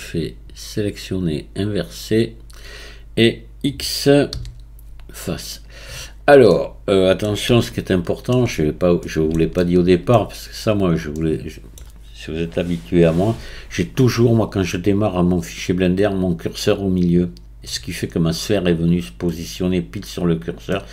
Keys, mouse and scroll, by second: 0.8-4.0 drag, 4.5 x, 6.1-6.5 scroll down 5, 6.5-10.5 middle drag, 10.5-11.2 scroll up 1, 11.2-14.2 middle drag, 20.7-20.9 middle drag.